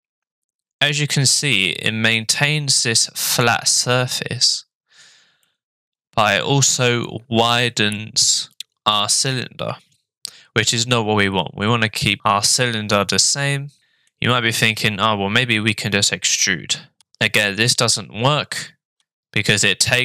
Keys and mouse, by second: 5.5 middle click, 13.8 ctrl+z, 13.8 middle click, 17.0 e.